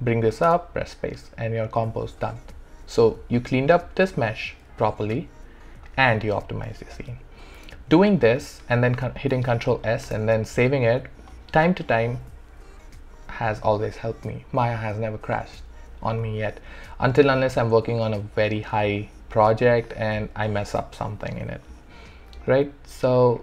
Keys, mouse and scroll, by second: 0.5 space, 3.4 click, 4.8-7.8 alt+drag, 9.3 ctrl+s, 10.1 space, 17.3-23.4 alt+drag.